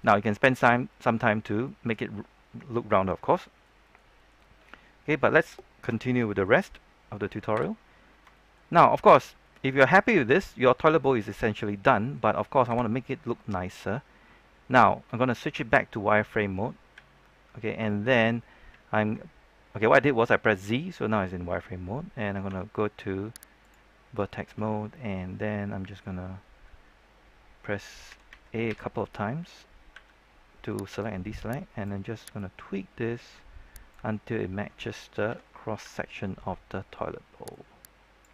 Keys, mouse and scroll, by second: 0.1 middle click, 2.9-3.3 scroll down 1, 3.3 middle click, 4.4-4.9 scroll down 1, 4.9-5.5 scroll up 1, 5.9 shift+middle click, 7.5 KP_3, 8.3 shift+middle click, 9.2 scroll down 1, 9.4 middle click, 10.5 scroll up 1, 10.7-12.6 middle drag, 12.6 KP_3, 13.3 shift+middle click, 16.9 z, 17.5 scroll up 1, 17.8 shift+middle click, 22.4 ctrl+Tab, 23.5 click, 24.0 scroll down 1, 24.2 shift+middle click, 24.6-27.5 scroll up 1, 27.6-28.0 scroll down 1, 29.9 typing, 30.9-34.3 drag, 34.3-35.2 scroll up 1, 35.2-35.8 typing, 37.4-38.3 drag.